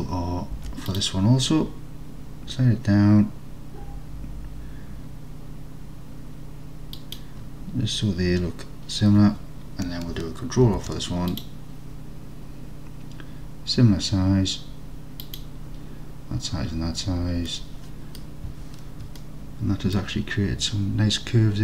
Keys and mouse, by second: 0.6 ctrl+r, 5.6-7.0 middle drag, 7.0 click, 10.7 ctrl+r, 15.3 click, 17.6 middle click, 19.4 alt+click.